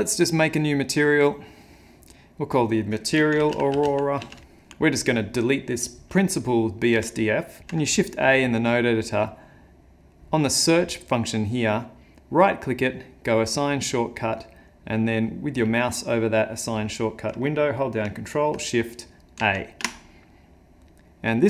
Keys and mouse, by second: 0.9 click, 2.4 click, 6.5 click, 7.1 x, 7.6 shift+a, 21.3 click.